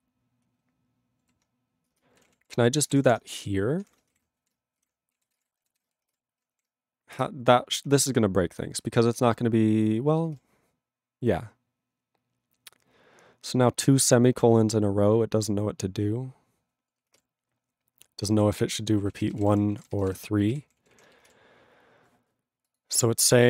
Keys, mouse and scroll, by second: 1.2 ctrl+e, 1.9-4.8 typing, 4.4 ctrl+e, 5.1 ctrl+a, 5.2 ctrl+space, 5.3 ctrl+e, 5.4 ctrl+g, 5.8 ctrl+s, 8.0 ctrl+s, 9.0 ctrl+n, 9.1 ctrl+e, 17.3 ctrl+e, 18.4 ctrl+p, 19.0 ctrl+space, 19.1 ctrl+a, 19.3 ctrl+g, 19.4 ctrl+e, 19.5 ctrl+n, 19.7 ctrl+a, 19.8 ctrl+n, 20.0 ctrl+space, 20.1 ctrl+e, 20.6 ctrl+g, 20.6 ctrl+p.